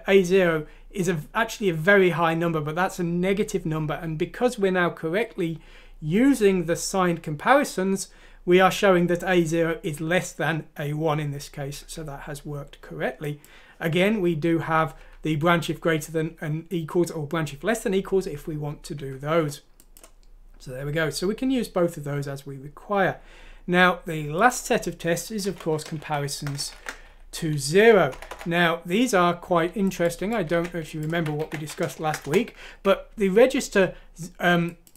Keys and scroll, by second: 25.4 Home, 25.9-27.0 typing, 28.3 typing, 30.5 ctrl+c, 31.1 ctrl+f, 31.4 ctrl+v, 31.7-32.5 typing, 32.7 Escape, 33.7-34.5 typing.